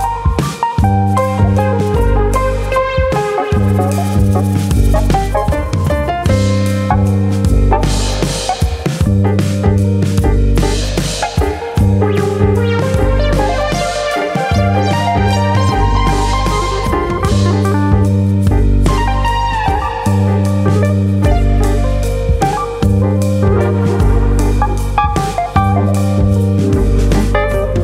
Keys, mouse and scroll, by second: 0.3 scroll up 1, 0.6 middle click, 1.1 shift+middle click, 1.3 middle click, 2.9 ctrl+r, 4.4 click, 4.6 middle click, 5.0 shift+middle click, 5.3 middle click, 5.7-6.6 scroll up 2, 6.0 middle click, 6.6 click, 6.8 middle click, 7.4 click, 8.3 middle click, 8.8 click, 9.3 click, 9.5 middle click, 10.2 click, 11.3 middle click, 11.7 shift+middle click, 12.0 middle click, 13.9 click, 15.5 3, 15.9 middle click, 16.5 click, 17.2 shift+click, 17.4 middle click, 18.6 i, 21.2 click, 21.4 middle click, 21.7 shift+middle click, 22.0 middle click, 22.9 right click, 23.9 middle click, 24.3 s, 25.0 click, 25.1 middle click, 25.7 shift+middle click, 26.1 middle click, 27.1 KP_3.